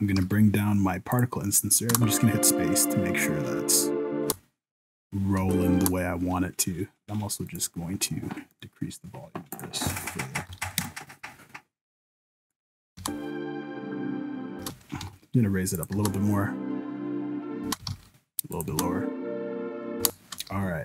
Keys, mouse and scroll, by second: 0.1 g, 1.9 space, 4.2 space, 5.4 space, 5.8 space, 12.4 click, 13.0 space, 14.6 space, 14.9 g, 16.0 space, 17.8 g, 17.8 space, 18.7 space, 20.0 space, 20.5 n.